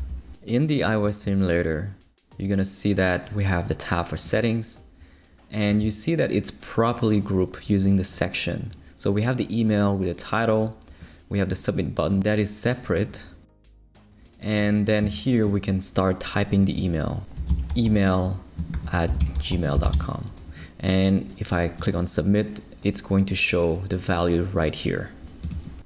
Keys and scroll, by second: 0.0 super+r, 17.1-20.4 typing.